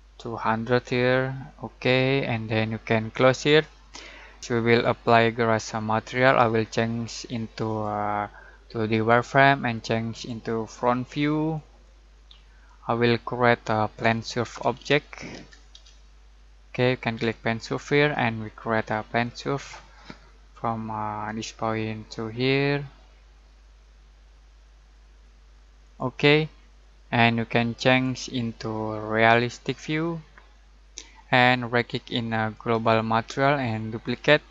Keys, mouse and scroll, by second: 7.6 click, 12.7-13.0 scroll down 1, 13.0-13.9 middle drag, 14.4-15.7 typing, 17.6 click, 18.3-18.7 scroll down 1, 18.7-19.4 scroll up 1, 19.4-21.1 scroll up 1, 21.2 click, 25.8 click, 32.5 right click, 33.9 click.